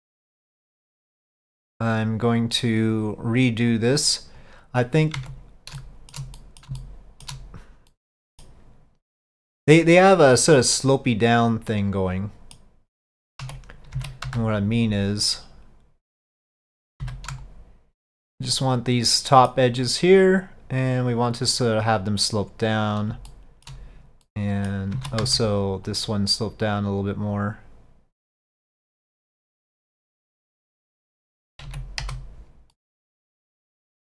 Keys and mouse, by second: 0.5 click, 1.4 click, 3.8 click, 5.2 Tab, 5.9 shift+middle click, 6.4 middle click, 6.9 shift+middle click, 8.0 middle click, 11.8 middle click, 14.0 alt+a, 14.3 c, 17.4 shift+c, 18.6 middle click, 20.5-23.1 drag, 23.4 shift+middle click, 24.4 middle click, 25.0 alt+a, 25.3 c, 28.5-30.6 drag, 32.8-34.0 middle drag.